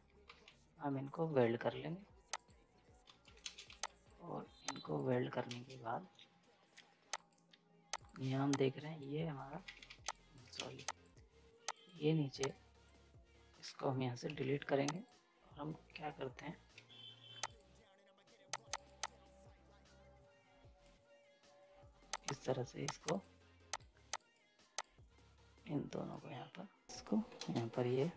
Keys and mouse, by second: 0.3 ctrl+z, 2.3 click, 3.1 z, 3.2 right click, 3.4 ctrl+space, 3.7 z, 3.8 click, 5.5 ctrl+space, 7.1 click, 9.6 ctrl+z, 10.1 click, 10.5 ctrl+space, 10.9-14.9 drag, 16.7 F10, 17.4-26.9 drag, 26.9 right click, 27.4 space.